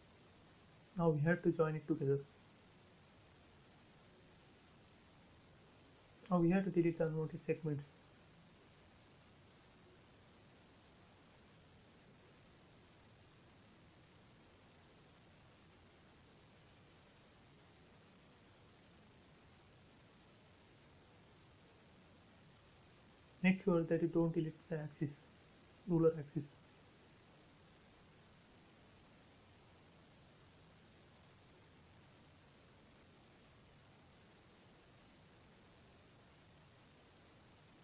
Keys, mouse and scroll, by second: 0.1-0.8 scroll up 1, 1.2 m, 2.3 click, 4.7 space, 4.8-5.5 scroll up 1, 6.1 e, 6.5 click, 6.7 space, 6.8 scroll down 1, 8.4 shift+middle click, 9.2-9.5 scroll up 1, 10.5 e, 10.6-12.0 drag, 12.0 space, 12.1 scroll down 1, 12.6 shift+middle click, 13.1 scroll up 1, 13.4 e, 13.6-15.1 drag, 15.1 space, 15.2 scroll down 1, 15.7 shift+middle click, 16.0 scroll down 1, 16.7 shift+middle click, 17.2 scroll up 1, 17.9 e, 18.3 click, 18.4-20.3 drag, 20.3 space, 20.5-21.3 scroll down 1, 21.6 e, 21.7-25.7 drag, 25.7 space, 25.9 scroll down 1, 26.9 scroll down 1, 27.0 shift+middle click, 27.6-28.2 scroll up 1, 28.3-29.4 scroll up 1, 30.3 e, 31.9-32.7 typing, 33.0 click, 36.4 space, 36.7-37.8 scroll up 1.